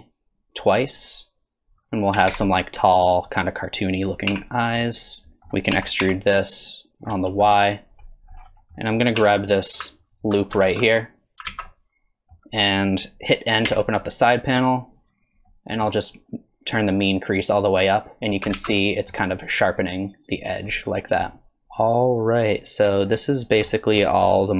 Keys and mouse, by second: 1.7 click, 2.2 g, 4.3 3, 4.8 middle click, 5.8 e, 7.5 middle click, 8.8 click, 9.2 2, 11.5 alt+z, 11.7 middle click, 13.7 n, 15.1 click, 15.5 middle click, 17.3 click, 18.6 alt+z, 18.8 middle click, 20.0 click, 21.3-23.1 middle drag, 21.6 Tab, 23.7-24.0 shift+middle drag, 24.3 middle drag.